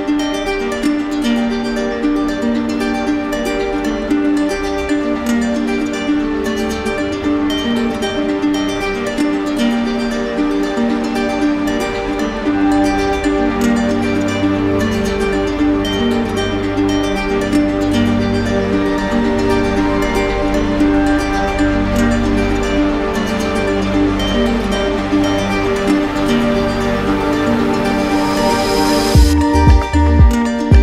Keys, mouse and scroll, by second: 5.0-6.1 drag, 7.2-8.3 drag, 10.4-11.4 drag, 12.6-13.6 drag, 13.9-16.8 right drag, 17.3-18.3 right drag, 19.7-20.7 drag, 21.6 r, 24.6-26.1 drag, 27.1 right click, 28.6 click, 29.7 right click.